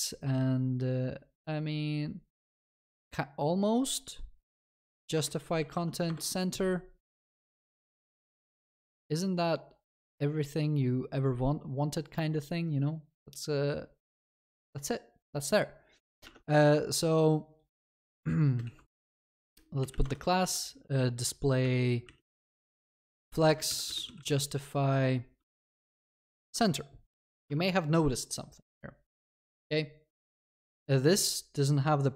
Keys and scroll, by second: 20.1 Return, 26.4 ctrl+s.